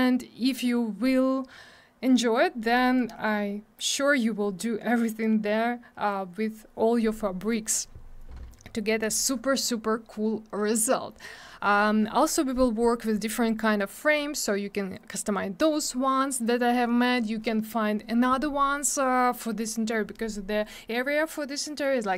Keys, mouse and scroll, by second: 11.3 scroll down 1.